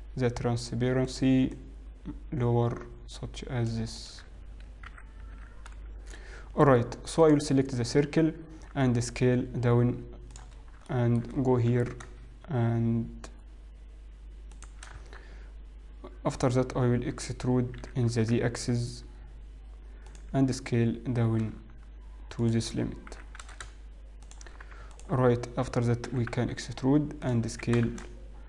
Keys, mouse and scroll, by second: 1.2 click, 1.6 click, 4.6 click, 6.6-7.3 scroll up 2, 7.3 click, 8.7 s, 10.6 scroll up 2, 11.2 shift+middle click, 11.9 g, 16.0 Tab, 17.8 e, 20.6 s, 24.2 shift+g, 25.1 alt+click, 26.7 e, 27.6 s.